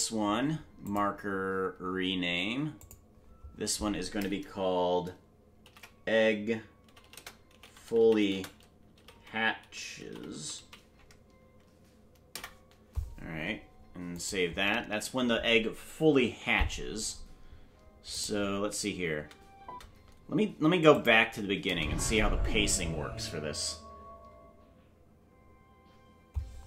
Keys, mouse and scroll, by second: 0.8-14.3 drag, 18.1 click, 18.1 l, 20.4 space, 20.9 click, 21.6 space.